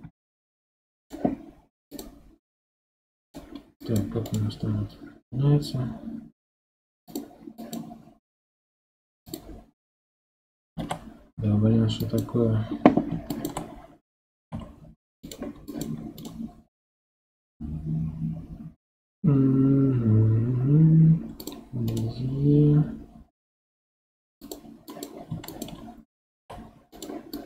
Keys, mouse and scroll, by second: 0.0 g, 1.9 click, 2.8 g, 3.8 click, 4.2 right click, 7.6 click, 8.5 g, 10.0-10.7 scroll down 1, 10.7 ctrl+z, 12.0 click, 14.4 g, 15.7 click, 16.2 right click, 21.9 right click, 24.9 click, 26.4 g, 27.3 click.